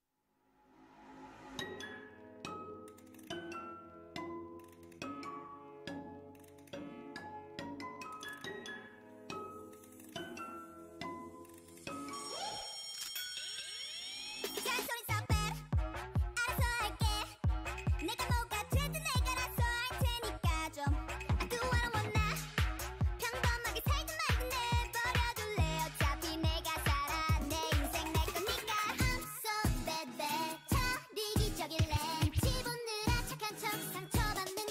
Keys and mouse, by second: 1.6 ctrl+Tab, 3.0-4.0 drag, 10.4-12.9 typing, 13.6 ctrl+Tab, 14.2-15.5 drag, 15.7 o, 16.1 s, 17.3 s, 17.7-19.5 drag, 20.9-22.7 right drag, 21.2 x, 27.5-29.3 right drag.